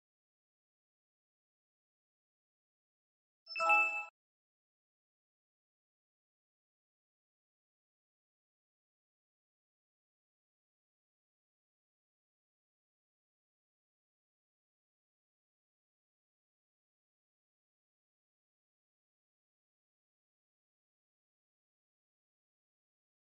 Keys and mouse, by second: 23.1 KP_3.